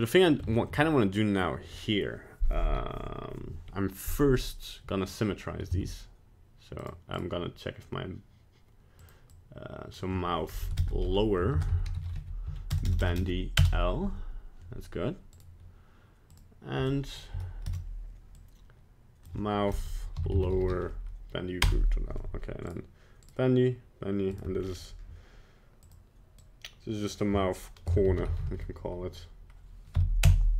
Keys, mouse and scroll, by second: 0.5 shift+middle click, 0.9 middle click, 5.0 right click, 5.7 z, 7.1 right click, 9.0 click, 10.8 BackSpace, 12.8 BackSpace, 13.0 BackSpace, 15.3 right click, 16.3 click, 17.6 BackSpace, 22.7 right click, 23.2 right click, 24.3 right click, 24.6-25.0 scroll down 5, 25.8 click.